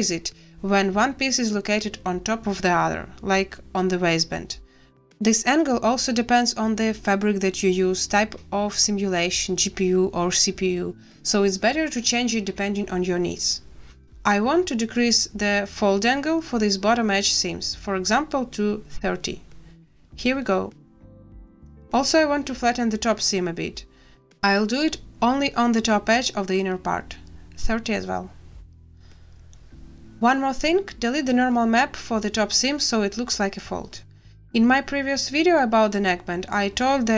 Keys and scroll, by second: 19.0 3, 19.2 0, 19.5 Return, 27.2 3, 27.4 0, 27.7 Return, 32.5 a.